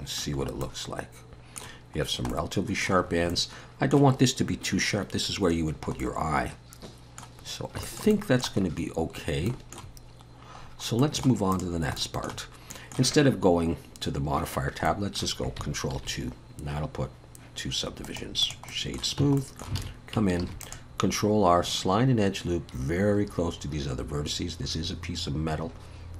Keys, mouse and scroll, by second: 0.4-0.9 scroll up 3, 0.6 middle click, 2.0 scroll down 2, 2.3 middle click, 3.1-3.5 scroll up 2, 3.3 middle click, 5.7-6.0 scroll down 1, 6.0 middle click, 7.5-7.9 scroll down 2, 7.9 shift+middle click, 8.1 middle click, 8.6-9.5 scroll up 4, 9.5 shift+middle click, 10.6-11.0 scroll down 3, 11.0 middle click, 11.5 click, 12.0 shift+middle click, 12.7 middle click, 14.9 middle click, 16.0 ctrl+2, 18.0 right click, 18.7 middle click, 19.2 Tab, 19.4 middle click, 19.8 alt+a, 20.4 ctrl+r.